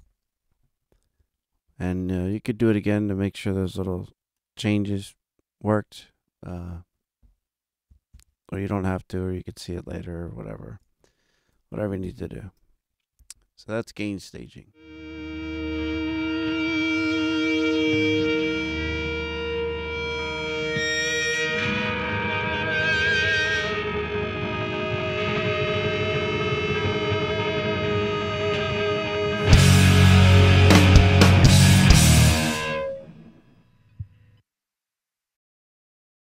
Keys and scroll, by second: 8.0 super+=, 10.8 alt+a, 11.4 ctrl+alt+super+a, 11.9 ctrl+alt+super+Up.